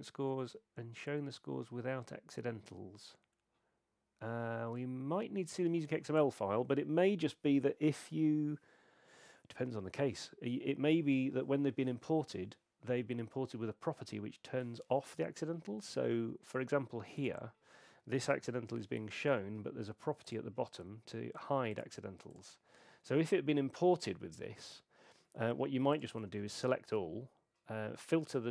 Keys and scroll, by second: 26.2 super+a.